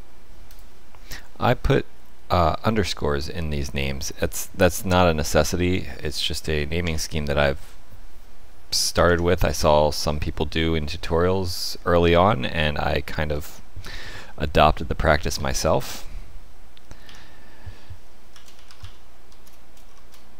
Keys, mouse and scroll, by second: 0.4 click, 6.8 Tab, 9.0 Tab, 10.4 middle click, 12.5 shift+middle click, 14.1 middle click, 17.0 F2.